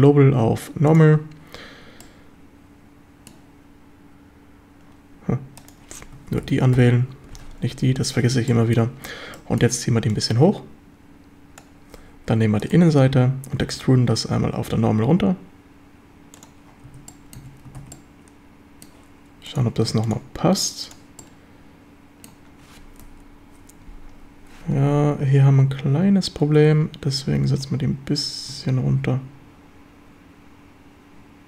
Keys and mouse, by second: 2.0-3.3 middle drag, 6.4 ctrl+k, 6.9 ctrl+l, 8.5 middle drag, 9.3 middle click, 10.1-11.6 drag, 12.3 3, 13.7 e, 16.3 click, 16.9 Tab, 17.1 drag, 17.4 a, 17.8 ctrl+s, 17.9-18.9 drag, 19.5-21.1 drag, 21.2-22.3 middle drag, 23.1 KP_7, 27.6 Tab, 27.6-31.4 drag.